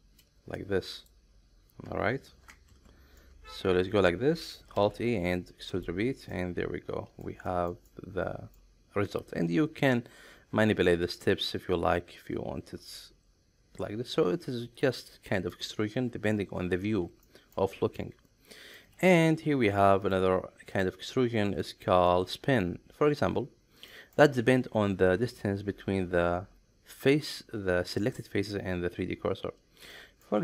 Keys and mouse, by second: 3.2-4.5 middle drag, 4.8 alt+e, 6.3-7.2 middle drag, 7.5 shift+middle drag, 7.8-8.6 middle drag, 11.1-15.5 drag, 17.2 shift+middle click, 18.0 middle click, 19.0 shift+middle click, 20.1 click, 20.7 click, 21.6 middle click, 22.1 shift+middle click, 23.9 middle click, 27.0 click, 29.9 middle click.